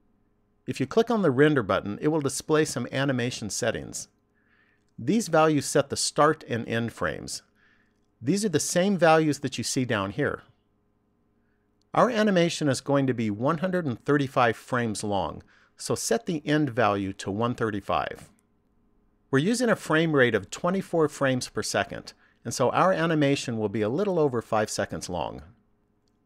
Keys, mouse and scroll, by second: 3.1 click, 13.8 click.